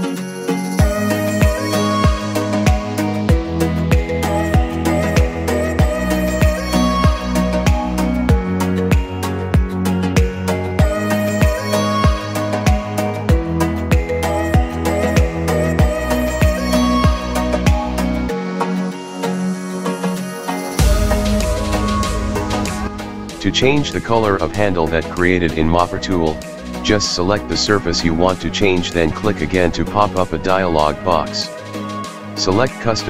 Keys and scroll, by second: 15.5 Escape.